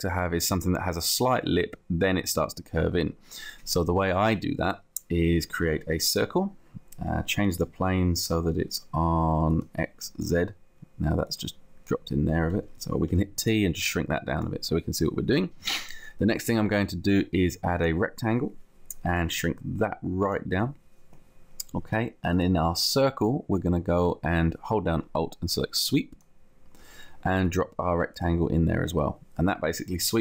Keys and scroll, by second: 13.1 t, 15.7 t.